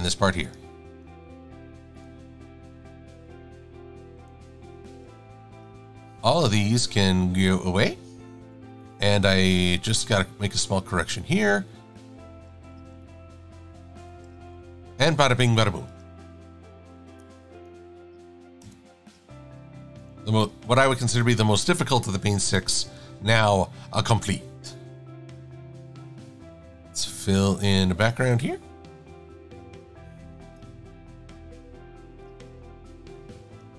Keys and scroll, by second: 12.8 shift+c, 14.5 shift+super+a, 15.2 a, 26.6 i, 30.6 l.